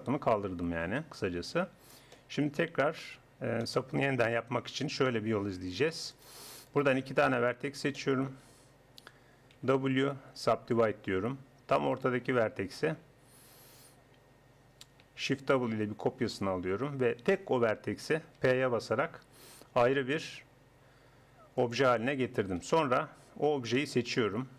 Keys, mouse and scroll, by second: 0.9 KP_1, 1.6 click, 6.1-9.6 right drag, 9.6 w, 12.0-13.8 drag, 15.6 shift+d, 18.4 p, 22.6 KP_1.